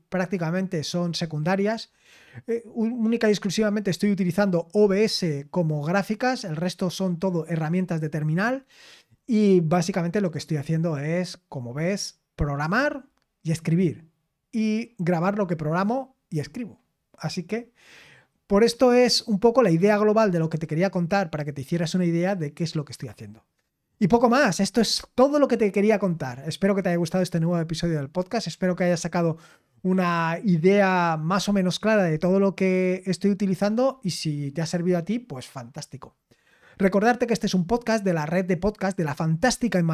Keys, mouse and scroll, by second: 24.4-25.1 scroll down 1, 25.1-39.9 scroll down 1.